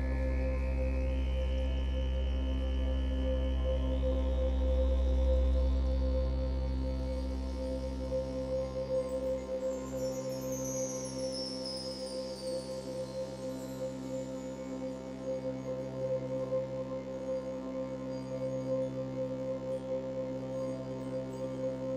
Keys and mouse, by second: 0.5-3.0 drag, 6.9-8.4 ctrl+alt+drag, 9.1 click, 10.7 typing, 11.8 click, 14.6 alt+click, 15.4-15.8 alt+shift+drag, 16.9-18.5 typing, 17.7 click, 19.9 click, 21.0 typing.